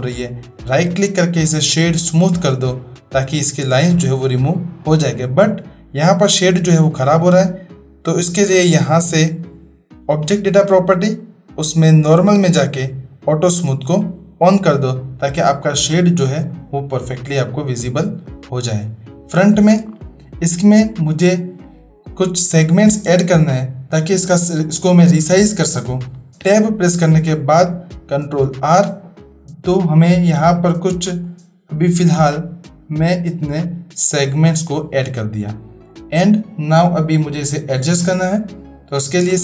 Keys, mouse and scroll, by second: 0.5-2.2 middle drag, 9.0 click, 12.0 click, 13.5 click, 16.4-17.2 middle drag, 19.5 shift+middle click, 26.3 ctrl+r, 26.4 Tab, 28.3 ctrl+r.